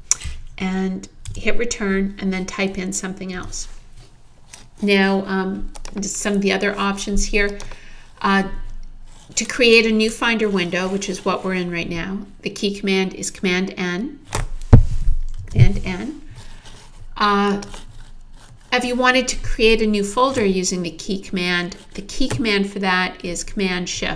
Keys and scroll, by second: 1.3 Return, 3.4 Return, 15.4 super+n, 24.0 shift+super+s.